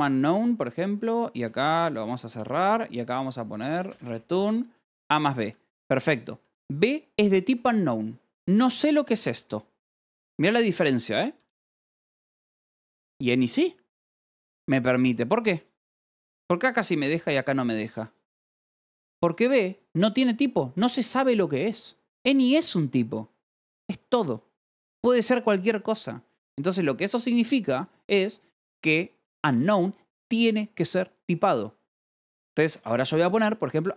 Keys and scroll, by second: 0.7 o, 1.9 Escape, 1.9-6.3 typing, 4.7 Return, 4.9 Escape, 7.4 l, 9.0-10.0 typing, 11.1-12.7 typing, 15.1 k, 16.9 u, 18.8 j, 19.4 h, 32.5-33.9 typing.